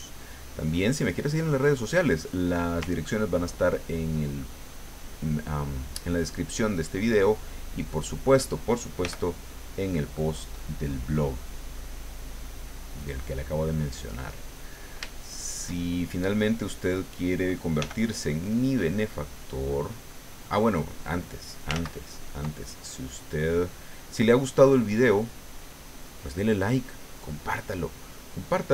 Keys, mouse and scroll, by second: 3.6-7.2 ctrl+drag, 7.7 click, 9.0 f, 9.4 click, 12.3-13.9 drag, 14.5 middle click, 15.1-17.0 shift+middle drag, 17.8 f, 18.2 click, 18.7-21.7 drag, 21.7 ctrl+z, 22.7-24.0 ctrl+drag, 24.1-28.4 drag.